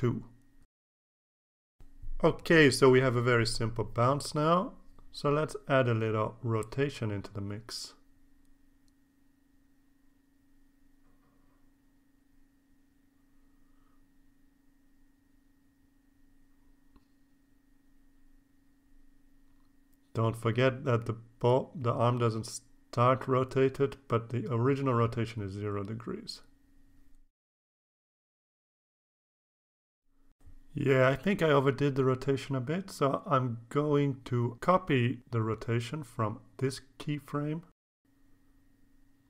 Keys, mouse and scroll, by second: 7.3 click, 8.1 click, 9.3-11.6 drag, 12.1 click, 12.5 click, 13.7 click, 14.7-16.3 drag, 18.0-20.6 drag, 20.8 click, 21.4 click, 22.6 KP_0, 22.8 KP_Enter, 25.0-35.6 drag, 37.4-38.4 drag.